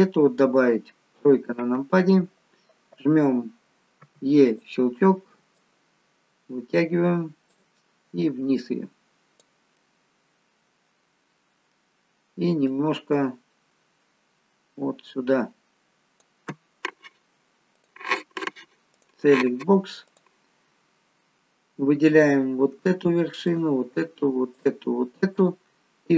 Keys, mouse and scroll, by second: 1.1 KP_3, 4.0 e, 5.5 click, 8.2 click, 9.7 middle click, 13.3 click, 17.8 click, 19.0 click, 20.1 click, 23.4 shift+click, 24.4 shift+click, 25.6 shift+click.